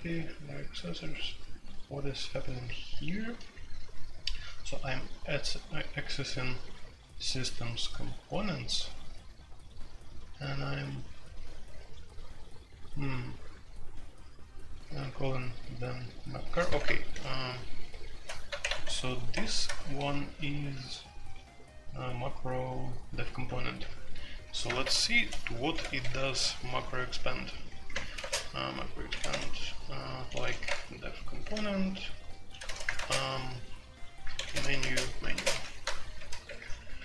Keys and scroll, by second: 3.2-3.6 typing, 14.8 j, 16.7 alt+2, 18.6 alt+1, 18.8 Escape, 19.3 Escape, 19.8 ctrl+u, 20.6 ctrl+u, 21.2 ctrl+u, 25.1-36.4 typing.